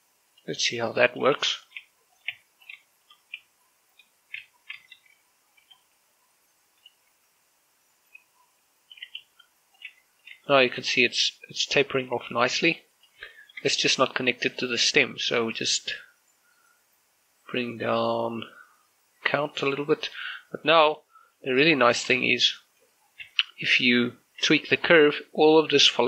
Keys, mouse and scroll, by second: 0.1 click, 0.3 r, 1.1 click, 1.4 g, 1.9 click, 2.2 r, 2.4 click, 2.6 g, 3.0 click, 3.1 Tab, 3.4 scroll down 1, 3.6 shift+middle click, 4.2 z, 5.2 Tab, 5.6 a, 5.8 a, 6.4 g, 6.8 y, 7.6 click, 7.9 Tab, 9.8 g, 10.0 y, 10.6 click, 10.7 Tab, 11.0 scroll down 1, 11.3 shift+middle click, 11.9 middle click, 12.8 scroll down 2, 13.0 shift+middle click, 13.8 scroll up 2, 14.1 shift+middle click, 14.4-15.2 scroll up 2, 15.2 right click, 18.8 click, 20.6-22.4 scroll down 1, 22.5 shift+middle click, 22.8 scroll up 1, 23.0 Tab, 23.6 z, 24.0 Tab, 24.3 right click, 24.8 Tab, 25.2 right click, 25.5 g.